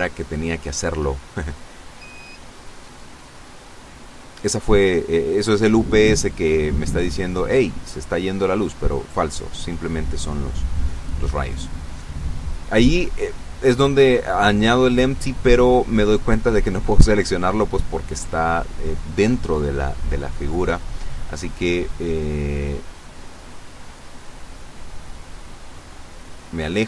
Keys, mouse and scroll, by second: 1.0 click, 3.7 shift+right click, 4.9 ctrl+shift+p, 6.0 Return, 7.8 right click, 8.8 g, 10.6 Escape, 11.7 right click, 15.1 ctrl+z, 16.0 ctrl+z, 17.1 ctrl+z, 18.9 ctrl+z, 20.8 right click, 22.3 middle click, 23.3 right click, 24.5 right click, 26.3-26.8 drag.